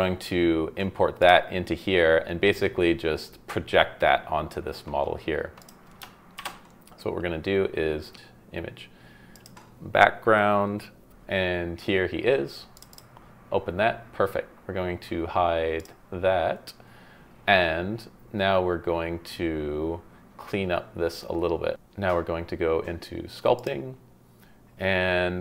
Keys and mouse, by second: 1.2 click, 5.6 click, 6.4 shift+a, 15.8 click.